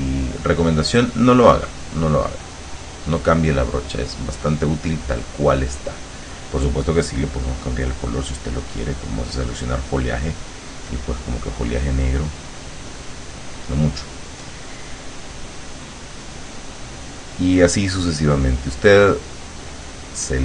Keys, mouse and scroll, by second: 2.7-6.2 drag, 7.2 click, 8.5 click, 10.0 click, 11.0 click, 11.4-13.3 drag, 16.3 click, 17.8 click, 18.7-20.1 drag.